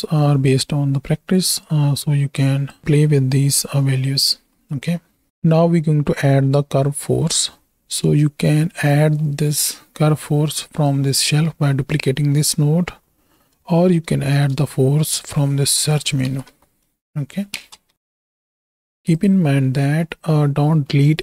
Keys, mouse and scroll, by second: 1.6-2.8 drag, 4.6 middle click, 8.6 middle click, 9.3 middle click, 10.9 click, 13.4 middle click, 14.2 shift+a, 19.9 middle click, 20.9 middle click.